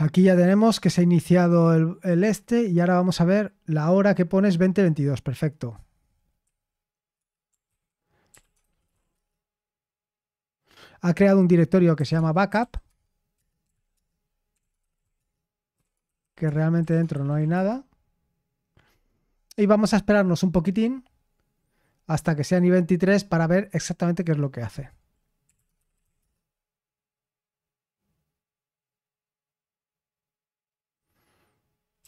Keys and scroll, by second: 6.4 q, 7.6 ctrl+c, 8.0-9.4 typing, 11.7-17.8 typing, 13.3 Return, 25.2-26.5 typing, 28.9 typing, 31.7-32.0 typing.